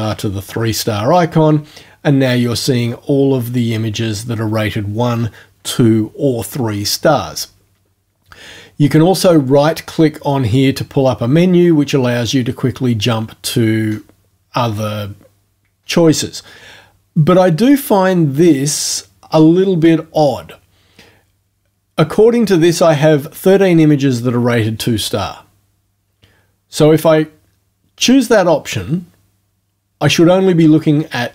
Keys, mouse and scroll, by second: 9.5 right click.